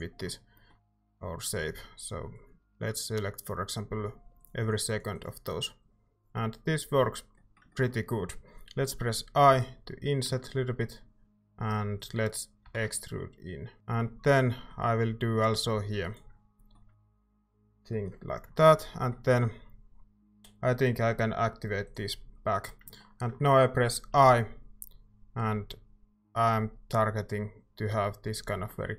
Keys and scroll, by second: 9.5 i, 12.6 e, 13.8 ctrl+s, 13.8 Tab, 13.8 a, 24.1 i.